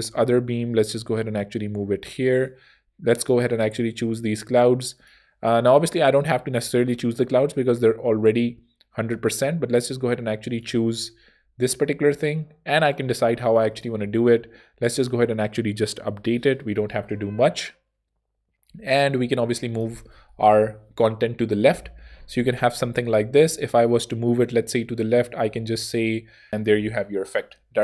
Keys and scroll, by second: 18.7 super+Tab, 20.4 super+p, 22.9 Escape, 27.2 super+p.